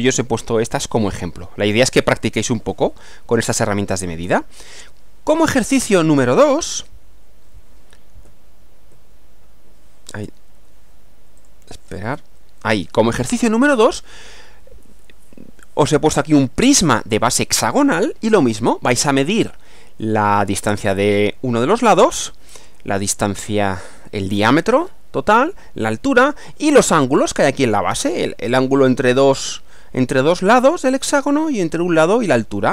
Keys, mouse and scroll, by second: 1.8 click, 4.2 Right, 5.9 click, 6.6 Right, 8.2 Right, 8.9 Left, 9.4 Right, 10.2 Page_Down, 11.4 click, 12.2 Page_Down.